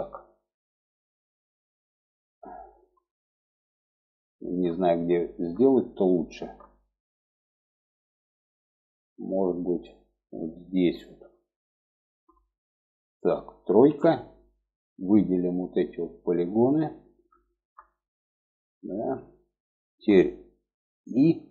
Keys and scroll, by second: 13.2 3, 20.5 i.